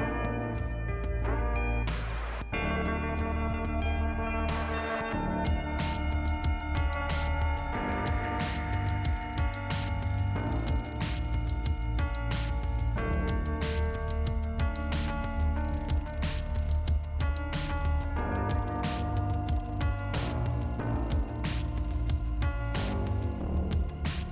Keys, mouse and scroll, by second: 2.0 click, 2.8 click, 3.6 click, 11.2 click, 11.9 click, 13.6 click, 14.0 scroll down 2, 15.3 scroll down 2, 19.4 click, 20.3 click, 22.0-23.0 scroll up 2.